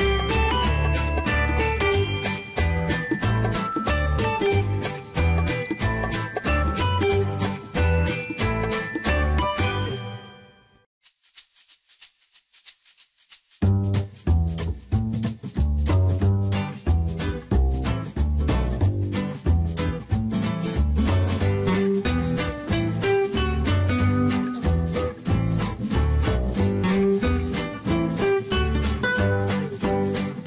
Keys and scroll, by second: 1.8-4.0 typing, 5.5 ., 6.7 BackSpace, 7.4 0, 9.5 1, 9.9 5, 10.1 Return.